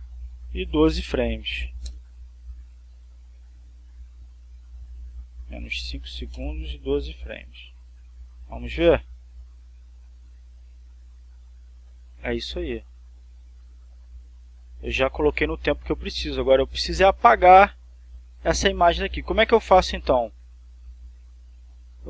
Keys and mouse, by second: 0.4-1.7 typing, 2.4 Return, 4.0 click, 6.2 5, 6.9 Return, 8.2-18.0 drag, 20.9-22.0 drag.